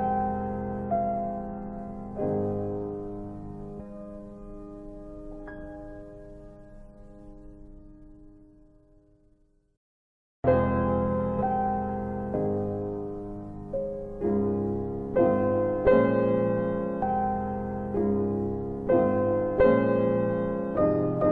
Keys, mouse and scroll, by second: 5.2 click, 6.2 alt+click, 8.2 alt+click, 8.9 alt+middle click, 9.7 alt+middle click, 10.4 alt+right click, 12.6 alt+click, 18.4 click.